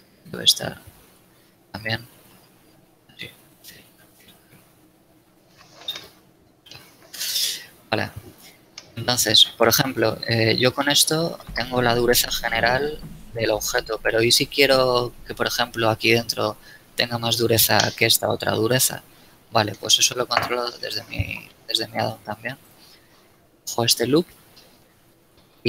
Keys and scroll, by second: 2.0 w, 5.3 z, 6.6 a, 10.5 Tab, 20.1 Tab, 22.0 ctrl+shift+Tab.